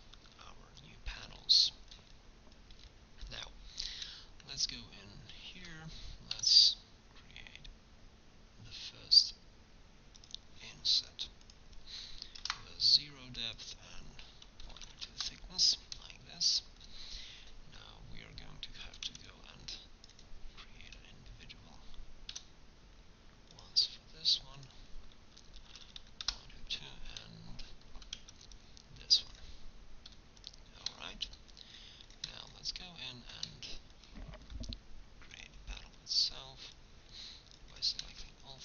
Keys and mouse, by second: 3.8-7.3 drag, 6.4 i, 11.4-13.6 drag, 15.4-16.5 middle drag, 18.7 middle click, 18.9 a, 19.1 c, 20.2 click, 20.9-22.0 right drag, 20.9 i, 24.6 click, 26.4 click, 26.5-28.0 middle drag, 28.0 a, 28.2 c, 29.4 click, 30.1 i, 33.5 click, 35.2 c, 36.6-37.8 middle drag, 37.8 click.